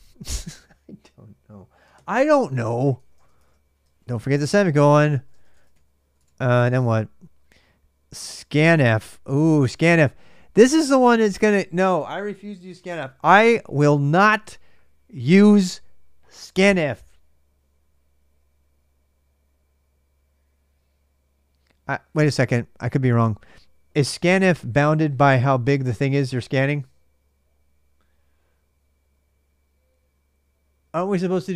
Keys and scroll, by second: 1.7-6.9 typing, 4.7 ctrl+[.